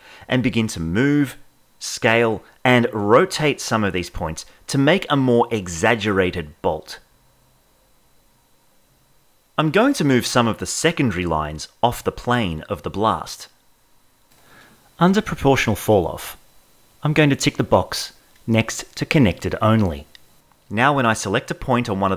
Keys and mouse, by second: 0.6 g, 1.1 g, 1.4 g, 1.6 g, 1.8 click, 2.0 shift+middle click, 3.0 g, 3.7 alt+s, 4.0 click, 4.9 click, 5.2-11.7 typing, 5.3 click, 5.8 click, 6.3 click, 8.7 click, 9.3 click, 10.0 click, 10.6 shift+middle click, 15.7-20.6 drag.